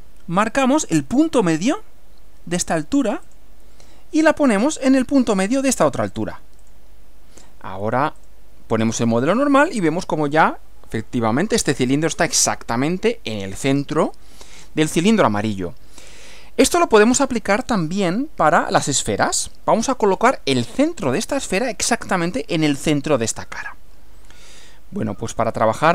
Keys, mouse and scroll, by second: 3.3 click, 6.7 click, 8.2 click, 8.8 click.